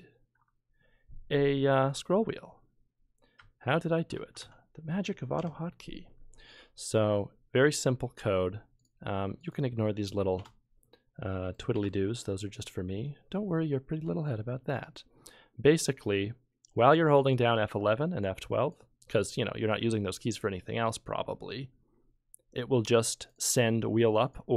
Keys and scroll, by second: 3.4 F11, 3.8 F12, 4.1 F11, 4.4 F12, 10.4 BackSpace, 11.7 BackSpace.